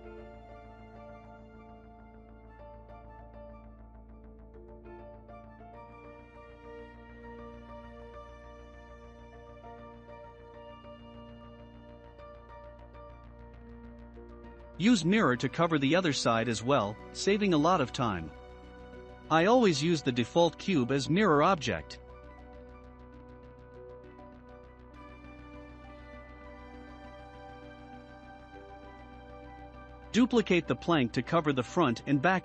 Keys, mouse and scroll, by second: 1.6 s, 6.0-7.0 drag, 7.4 scroll down 2, 7.8-9.2 shift+middle drag, 9.2-9.6 scroll down 1, 9.6-11.0 shift+middle drag, 11.0 click, 11.4-11.9 scroll up 2, 11.9-13.8 shift+middle drag, 13.8-14.5 drag, 17.3-21.7 drag, 21.7-23.1 shift+middle drag, 23.1-23.4 drag, 23.4-23.9 scroll down 3, 23.8-27.0 shift+middle drag, 27.0 click, 27.7-28.3 scroll up 1, 29.3 shift+d.